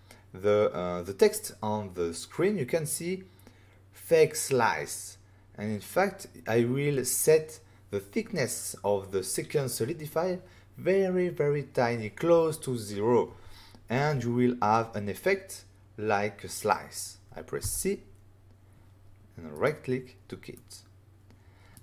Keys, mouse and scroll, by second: 17.6 c, 19.5 right click, 20.5 middle click.